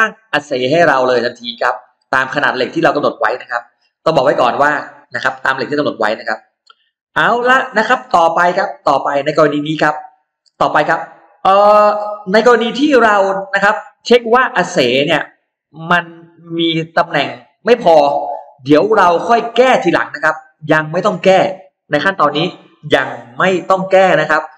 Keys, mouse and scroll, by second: 0.1-0.7 scroll up 2, 12.6-12.9 scroll down 2, 12.9 scroll up 2, 13.0-18.3 middle drag, 13.1 scroll down 1, 18.3-19.0 scroll down 2, 19.3 middle click, 19.7-20.0 scroll up 2.